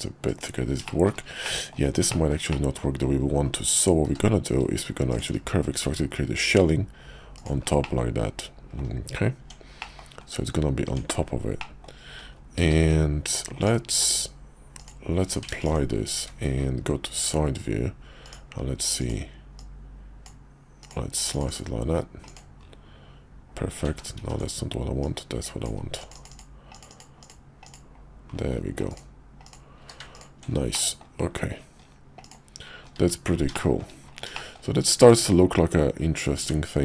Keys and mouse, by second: 0.8 shift+click, 1.0 shift+middle click, 1.4 middle click, 2.1 shift+middle click, 2.5 middle click, 4.0 q, 7.8 middle click, 9.4 Tab, 9.8 middle click, 10.8 Tab, 11.6 middle click, 12.6 q, 13.6 click, 14.8 click, 14.8 q, 15.2 q, 16.2 `, 17.2 KP_5, 17.4 KP_5, 18.2 click, 19.0 click, 19.5 click, 22.2 click, 23.9 ctrl+z, 24.2 ctrl+z, 25.0 click, 28.9 click, 29.4 click, 29.8 q, 30.7 middle click, 32.2 click, 33.0 `, 33.5 shift+middle click, 34.4 shift+middle click, 35.1 click, 36.4 Tab.